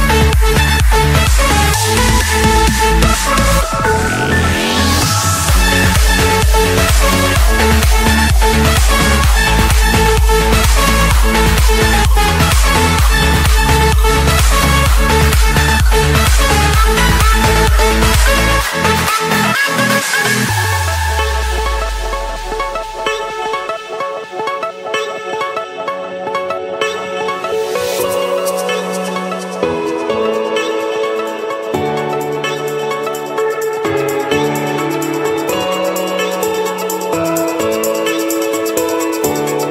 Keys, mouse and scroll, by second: 1.0 click, 1.3-1.6 scroll, 1.6 Escape, 2.6 Escape, 3.8-5.2 typing, 5.8 click, 6.0 Return, 6.5 click, 7.0 Return, 8.0 scroll, 8.2 Escape, 9.3 click, 10.1 click, 10.3 scroll, 11.0-11.6 scroll, 14.0 click, 14.2 Escape, 14.6 right click, 15.1 right click, 16.3 click, 18.6 middle click, 19.0 Escape, 20.3 click, 27.4 click, 29.2 click, 30.1 click, 30.4-31.1 scroll down 8, 31.6 click, 31.8 scroll, 32.0 Escape, 33.5 click, 35.5 click, 36.2 Escape, 36.5-38.6 typing, 37.5 Return.